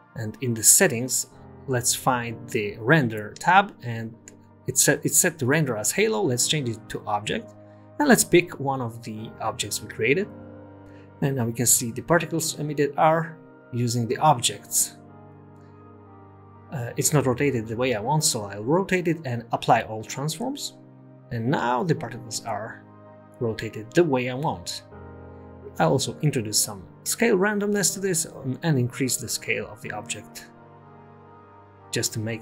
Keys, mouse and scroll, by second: 0.1 click, 2.8 click, 3.2-4.3 scroll down 2, 4.3-4.8 scroll down 3, 4.8-5.9 scroll down 2, 6.0 click, 8.2 click, 11.5 click, 13.4-14.6 scroll up 4, 14.6 scroll down 1, 14.6 scroll down 1, 14.6 space, 14.8 space, 15.2 space, 18.7 click, 19.2 click, 19.5 r, 20.9 ctrl+a, 23.1 space, 25.0 space, 25.4-26.0 scroll up 6, 26.0 click, 26.7 click, 31.3 click.